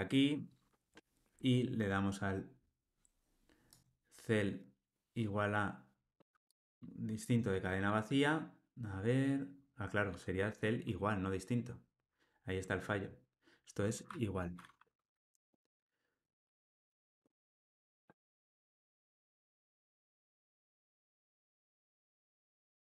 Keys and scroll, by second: 17.4 ctrl+r.